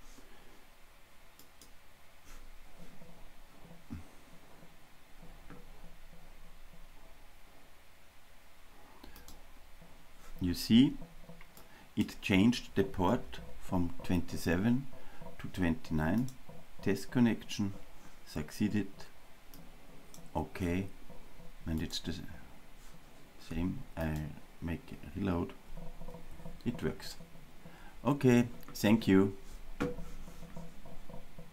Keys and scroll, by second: 9.6 super+i, 21.9 super+r, 24.2 super+r.